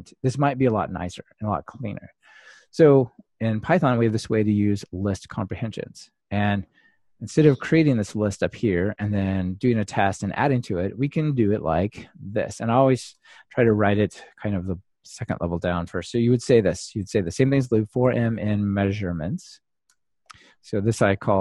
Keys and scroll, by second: 20.0 Return.